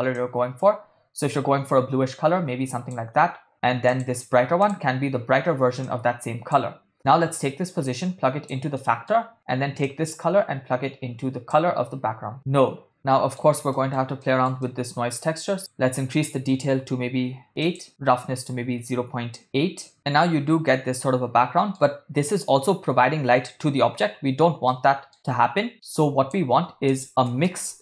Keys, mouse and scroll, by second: 3.9 click, 4.6 click, 6.9 middle click, 7.9-8.6 drag, 8.8 middle click, 9.9-12.3 drag, 12.9 middle click, 13.7 middle click, 14.2 ctrl+middle click, 14.6 middle click, 15.6-17.5 drag, 17.6-19.4 drag, 19.9-21.9 middle drag, 24.7 middle click, 25.8-26.8 drag, 27.2 shift+a.